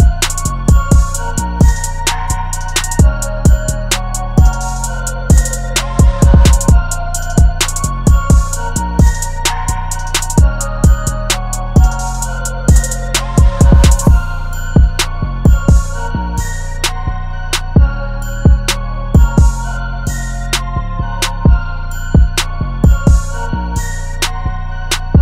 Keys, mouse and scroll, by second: 10.2 ctrl+t, 14.8 alt+shift+click, 17.0 Return, 17.4 Down, 17.7 Down, 17.8 Down, 18.1 Down, 18.3 Down, 18.7 Down, 19.4 Right, 19.6 Right, 20.1 Down, 24.4-24.8 typing.